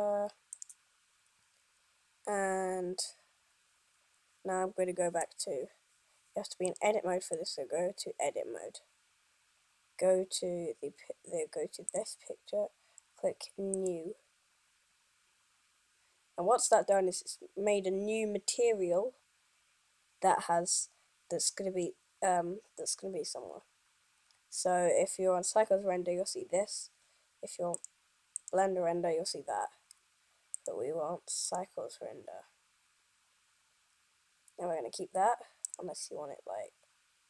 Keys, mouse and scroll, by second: 7.0 click, 7.7 click, 12.0 click, 30.6 click, 36.0 click.